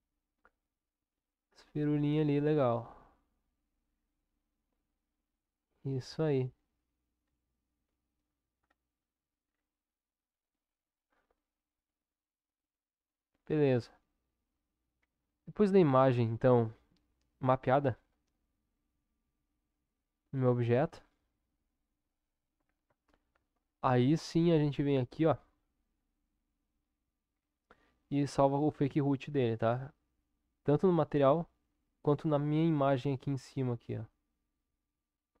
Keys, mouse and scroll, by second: 4.9-8.2 middle drag, 8.2 click, 15.0 Tab, 19.2 Tab, 22.9 ctrl+KP_7, 28.3 click, 32.0 click.